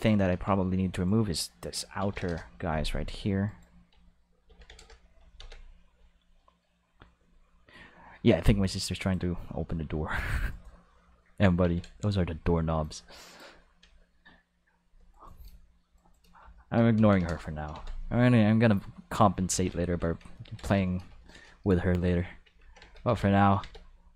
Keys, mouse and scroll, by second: 0.3 Tab, 0.9 right click, 2.0 ctrl+l, 2.2 x, 2.2 Return, 3.4 right click, 4.4 ctrl+l, 4.6 x, 4.7 Return, 5.3 ctrl+s, 8.6 click, 10.5 right click, 11.6 ctrl+s, 12.8-13.3 drag, 14.8 Tab, 15.1 right click, 15.9 shift+right click, 16.9 ctrl+l, 17.1 x, 17.7 ctrl+s, 18.7 click, 19.5 ctrl+s, 20.8 shift+middle click, 21.1 ctrl+middle click, 21.5 shift+middle click, 22.4 alt+a, 22.8 ctrl+s, 23.0 Tab, 23.6 ctrl+s.